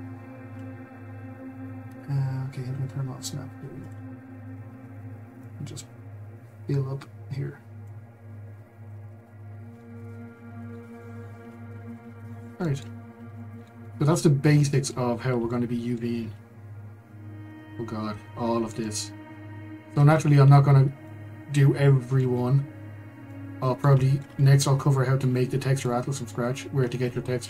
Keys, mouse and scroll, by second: 3.8 click, 5.5 click, 8.2 scroll, 9.8-11.3 middle drag, 11.3 Tab, 11.9 click, 12.3 middle click, 13.0 scroll, 13.3-15.1 shift+middle drag, 15.1-15.5 scroll, 15.5 shift+middle click, 16.4-17.4 scroll, 17.4 KP_Divide, 18.3 scroll, 18.8-20.7 middle drag, 20.7 scroll, 21.0-22.3 middle drag, 22.3 scroll, 23.3-24.3 middle drag, 24.3 scroll, 25.8-27.4 middle drag.